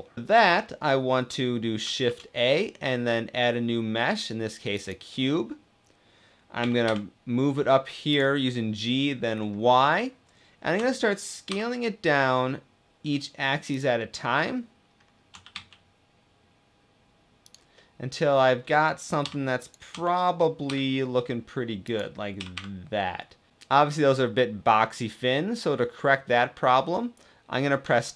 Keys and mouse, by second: 0.1 ctrl+s, 1.9 shift+a, 6.3 g, 6.5 g, 6.8 y, 7.8 click, 8.2-8.8 drag, 10.5 s, 11.1 y, 13.3 click, 13.8 click, 15.0 s, 15.2 z, 17.1 click, 17.4 click, 18.8 g, 19.3 click, 19.6 s, 20.3 g, 20.3 s, 21.5 y, 21.5 t, 22.2 y, 23.5-25.9 middle drag, 27.5 Tab, 28.1 Tab.